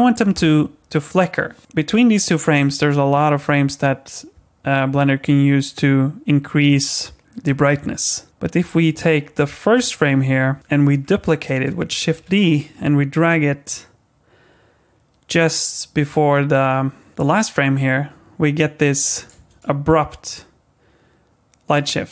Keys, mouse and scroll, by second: 9.0 click, 9.7 click, 10.6-11.6 scroll up 6, 11.6 scroll up 3, 12.1 shift+d, 17.2 click, 19.3 space.